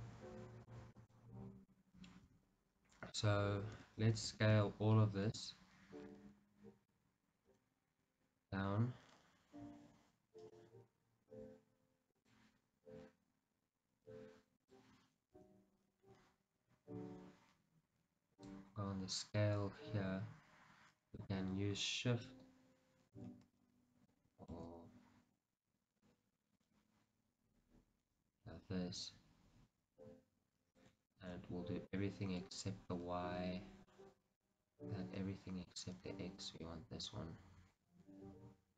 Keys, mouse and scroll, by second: 2.3 Tab, 4.3 a, 6.4 KP_1, 7.6 s, 10.6 right click, 12.2-18.9 drag, 15.4 Tab, 22.4-32.5 shift+drag, 24.9 ctrl+z, 31.5 ctrl+z, 32.5-34.9 middle drag, 35.0-36.7 middle drag, 36.7-38.7 drag.